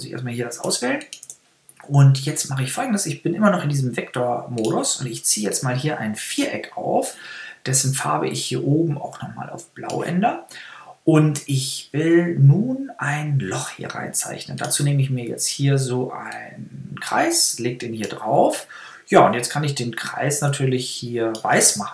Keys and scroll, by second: 0.4 BackSpace.